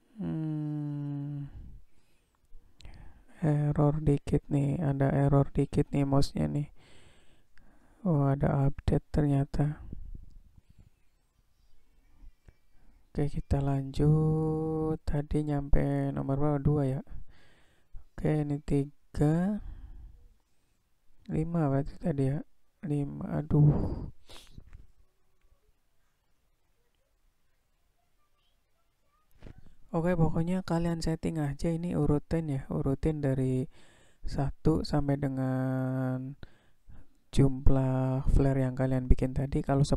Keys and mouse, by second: 0.2-4.1 drag, 12.4-16.3 drag, 17.2 click, 18.2-20.4 drag, 21.2-23.2 drag, 24.1-27.0 drag, 28.0 drag, 28.8-30.9 drag, 31.5 click, 31.9 click, 33.1-35.1 drag, 35.8 click, 37.2-39.3 drag.